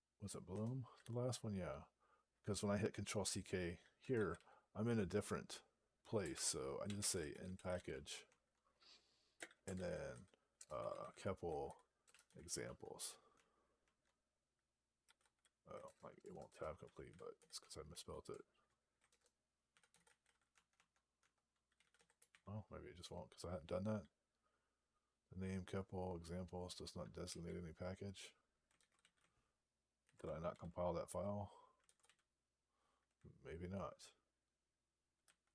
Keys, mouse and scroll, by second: 0.4 Return, 6.2-8.1 typing, 9.2-12.7 typing, 13.2 Tab, 14.6-17.7 typing, 15.7 alt+BackSpace, 18.9 alt+BackSpace, 19.3-22.2 typing, 20.6 Tab, 22.9 Return, 27.1 q, 30.4 ctrl+k, 35.1 alt+p.